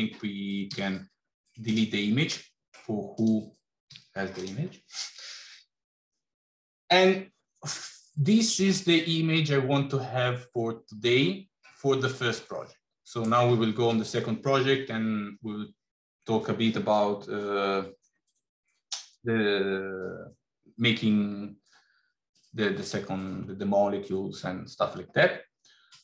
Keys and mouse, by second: 0.7 x, 2.3 middle click, 3.3 click, 3.7 x.